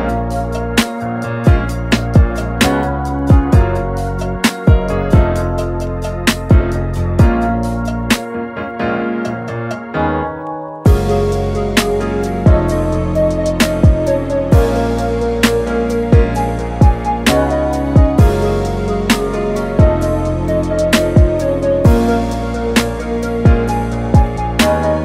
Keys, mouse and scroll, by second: 1.7-3.7 middle drag, 3.7-4.5 scroll down 3, 4.5-5.7 scroll down 1, 5.7 KP_Divide, 6.3-7.1 middle drag, 7.1-7.9 scroll up 3, 7.9-8.4 scroll down 3, 8.8 click, 9.7-10.6 scroll down 2, 13.3 click, 13.8-15.3 drag, 20.8-22.3 middle drag.